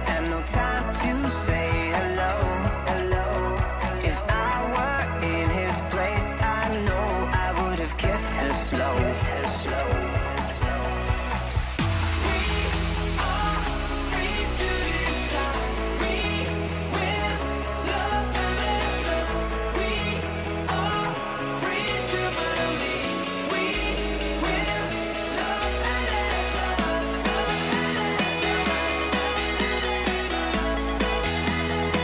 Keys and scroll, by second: 21.7 super+=, 29.4 super+g, 29.6 super+r.